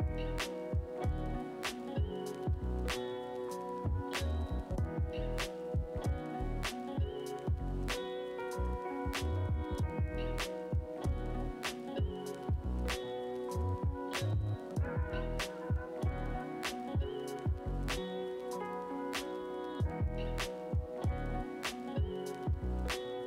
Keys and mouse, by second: 3.5 ctrl+z, 5.1 Tab, 5.3 a, 5.8 shift+n, 6.2 Tab, 7.7 ctrl+z, 16.3 f, 16.5 middle click, 17.0-23.0 drag, 22.9 f, 23.0 middle click.